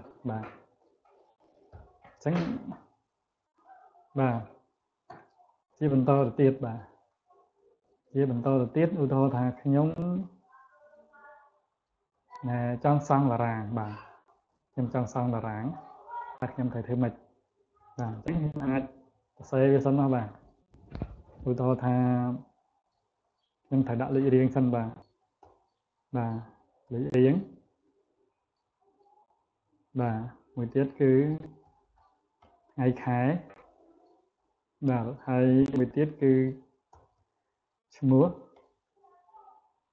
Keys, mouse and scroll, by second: 0.2 scroll up 1, 3.9 scroll down 1, 4.5 scroll down 3, 5.4 click, 6.4 scroll up 1, 7.4 click, 8.1 click, 8.5 click, 9.6 click, 9.9 click, 10.9 click, 11.4 click, 11.9 click, 19.3 click, 23.0 click, 28.5 click, 30.7-32.8 typing, 34.1 click, 38.4 e.